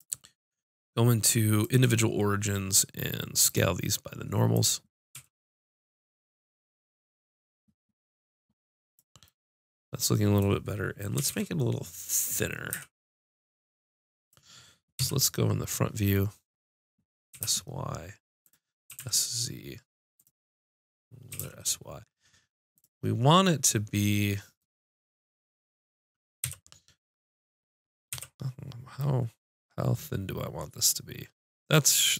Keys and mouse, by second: 0.6 click, 3.5-5.1 drag, 3.7-4.8 right drag, 5.4 s, 9.0 click, 9.4 click, 11.2 s, 15.0 KP_3, 17.3 s, 18.5-22.2 drag, 18.9 s, 21.3 s, 23.6 middle click, 26.4 KP_5, 28.1 KP_5, 30.4 middle click, 32.0-32.1 drag.